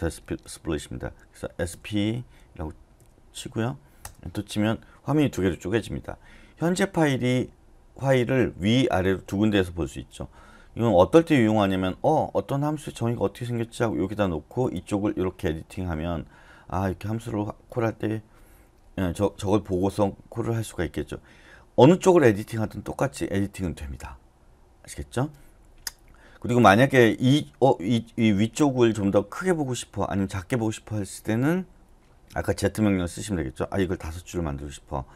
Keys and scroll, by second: 1.7 typing, 3.0 p, 4.0 Return.